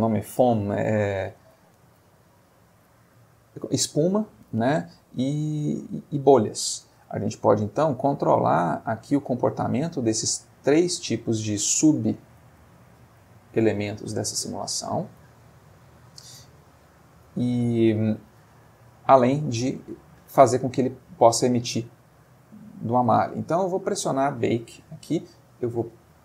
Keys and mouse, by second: 8.0 middle click, 15.2 click, 16.3 middle click, 17.4-18.0 middle drag, 19.3 click, 22.5-23.2 middle drag, 25.9 click.